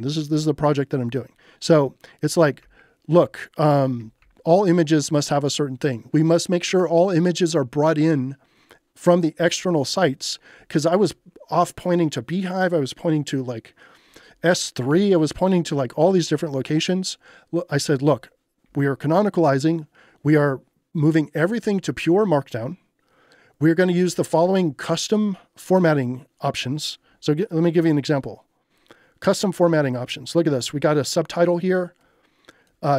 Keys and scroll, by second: 1.6 k, 2.9 k, 3.7 j, 4.2 k, 5.3 j, 6.3 j, 9.9 j, 14.9 j, 18.1 j, 24.4 j, 25.4 j.